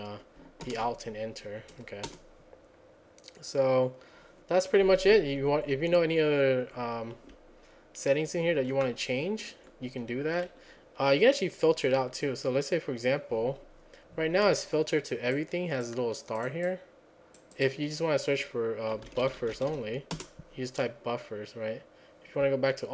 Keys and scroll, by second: 0.7 alt+Return, 2.1 Return, 4.9 Down, 5.1 Down, 6.0 Down, 6.5 Down, 6.6 Down, 6.7 Down, 7.4 Up, 7.9 Up, 7.9 Up, 8.1 Up, 8.1 Up, 8.2 Up, 8.8 Down, 8.8-9.3 Up, 9.3 Down, 9.4 Down, 9.5 Down, 9.5 Down, 10.4 Down, 18.8-20.2 typing.